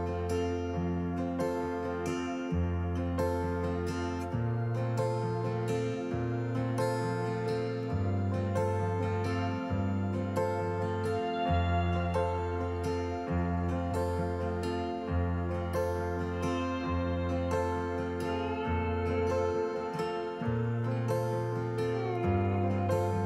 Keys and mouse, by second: 0.1 y, 4.3-5.8 drag, 7.4-9.6 drag, 11.6 click, 13.0-14.8 drag, 16.4 click, 18.1-19.8 drag, 21.2 alt+g, 22.7 click, 23.0 alt+g.